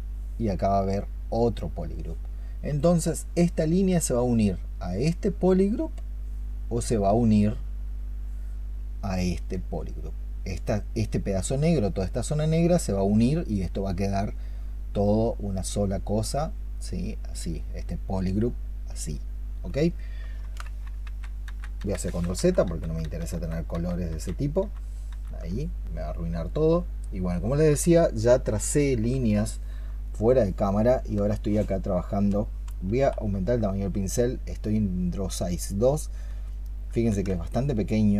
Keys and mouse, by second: 5.2 double click, 5.6 double click, 9.3 double click, 9.6 double click, 15.0 double click, 20.5 ctrl+z, 25.4 ctrl+z, 29.3 alt+click, 37.0 ctrl+z.